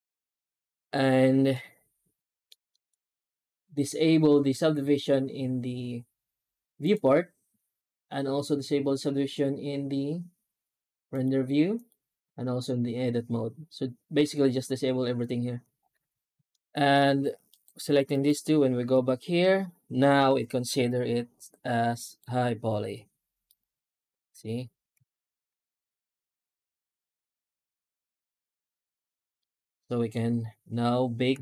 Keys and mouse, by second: 1.4 middle click, 2.6 shift+middle drag, 6.7 click, 11.0 click, 11.6 click, 16.4-16.8 middle drag, 17.4 right click, 18.0 shift+right click, 21.9 right click, 23.3 right click, 25.0 shift+right click, 28.1 ctrl+s, 29.2-30.0 middle drag.